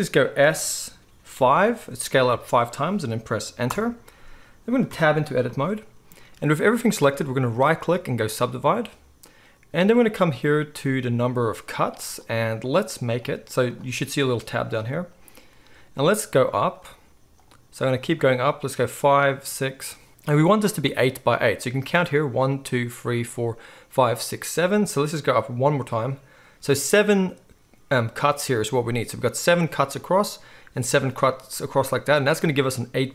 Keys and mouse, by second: 0.4 s, 4.9 Tab, 12.2-33.1 drag, 12.2-13.3 middle drag.